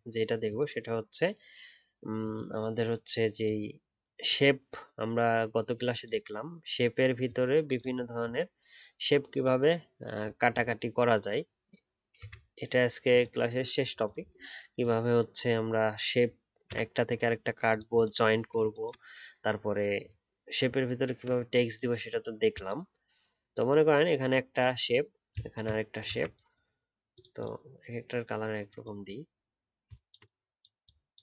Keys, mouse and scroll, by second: 30.8 alt+click.